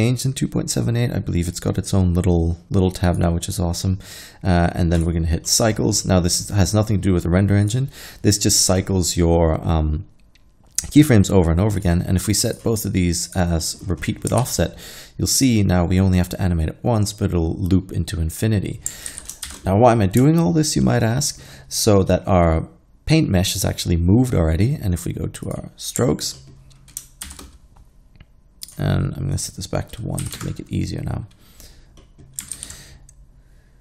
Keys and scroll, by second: 14.5 alt+a, 19.1 alt+a, 19.5 shift+Left, 27.3 shift+Left, 30.3 1, 30.4 Return, 32.6 alt+a.